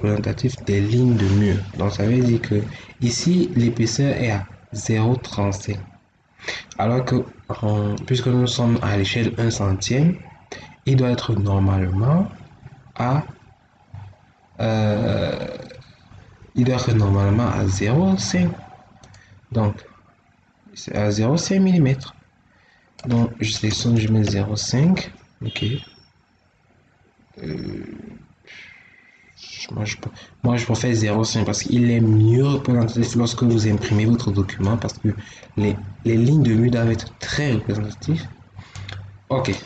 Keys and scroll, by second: 23.6 0, 23.9 ., 24.2 5.